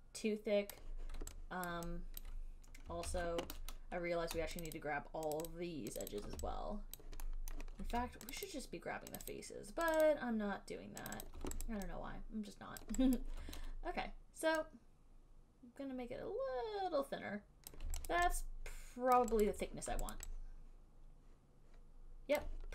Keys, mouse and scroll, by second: 0.9 click, 1.9 alt+right click, 2.4 alt+right click, 3.3 ctrl+z, 5.0 shift+click, 5.6 alt+click, 5.7 alt+click, 6.2 alt+click, 6.4 shift+click, 7.2 alt+click, 7.7 alt+middle click, 8.5 shift+click, 8.7 shift+click, 9.4 shift+click, 9.5 shift+click, 10.2 shift+click, 10.3 shift+click, 11.3 shift+click, 11.5 shift+click, 11.9 alt+right click, 13.0 alt+right click, 13.4 alt+right click, 17.9 click, 18.3 click, 19.4 alt+right click, 19.7 alt+right click, 20.4 alt+right click, 22.6 alt+click.